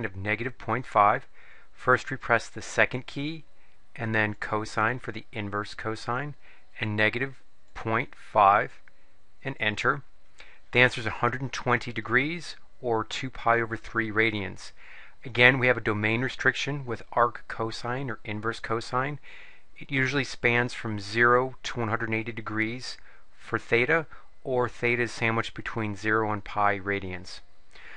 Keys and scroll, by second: 7.8 ., 8.7 5, 9.6 Return.